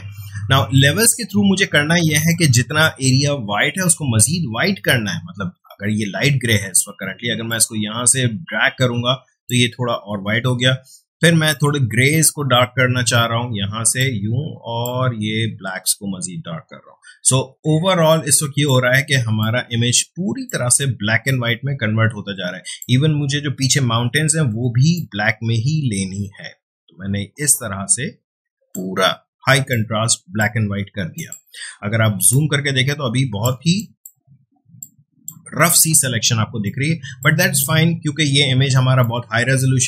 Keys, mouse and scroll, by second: 7.4-31.1 drag, 31.8 space, 32.3-36.6 ctrl+drag, 36.6-38.6 ctrl+drag, 38.6 space, 39.0-39.8 ctrl+drag.